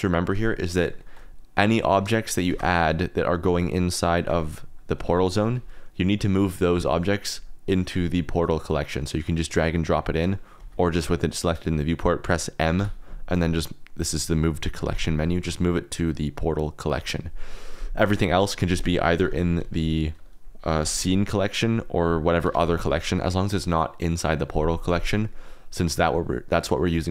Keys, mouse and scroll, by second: 1.0 shift+click, 2.2 shift+click, 2.4 shift+a, 5.0 g, 5.3 click, 5.5 r, 6.0 click, 6.7 ctrl+z, 9.8 click, 10.6 ctrl+z, 12.7 m, 19.1 m, 20.1 click, 20.7 m, 25.8 click, 26.8 click.